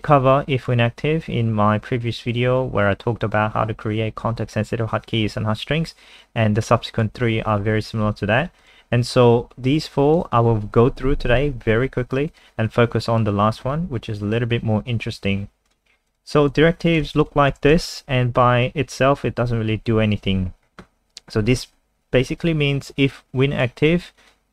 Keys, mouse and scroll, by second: 0.0 click, 17.1 ctrl+c, 17.2 click, 17.5 Return, 17.7 Return, 17.8 ctrl+v, 23.1 click.